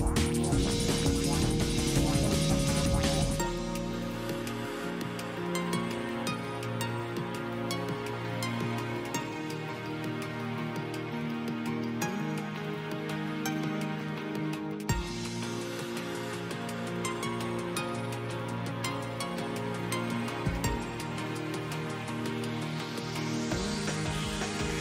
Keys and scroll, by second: 1.9 s, 2.2 ctrl+z, 3.3 F4, 5.5 F4, 9.2 e, 13.3 ctrl+z, 19.1 alt+x, 23.1 s.